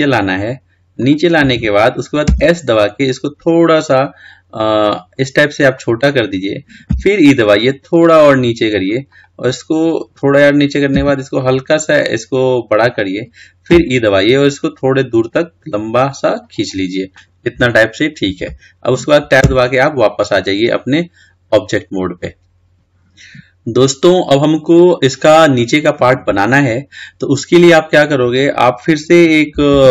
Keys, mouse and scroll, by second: 19.7 Tab, 20.4-22.6 middle drag, 23.0-24.0 scroll down 3, 24.0-26.3 scroll up 1, 26.3-26.7 scroll down 3, 26.7-29.9 scroll up 2.